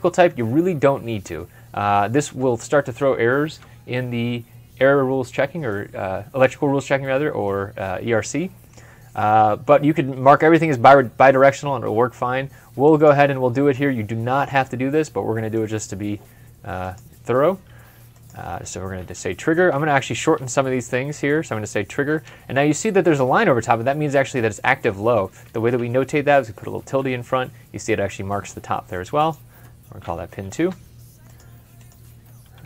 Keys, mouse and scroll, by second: 19.3-20.2 typing, 26.1-26.8 typing, 29.8-30.5 typing.